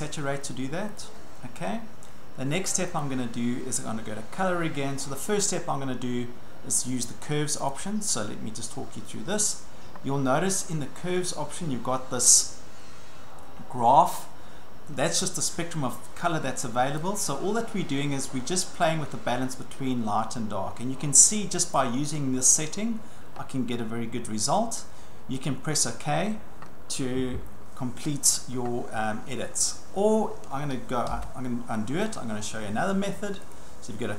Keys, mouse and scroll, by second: 1.0 click, 3.0 click, 7.7 click, 17.0 click, 21.8 click, 25.5 click, 30.8 click, 31.1 ctrl+z, 33.5 click.